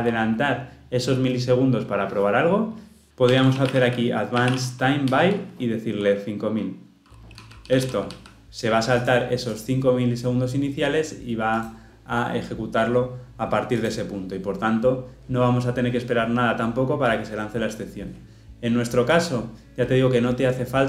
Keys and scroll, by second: 5.1 Return.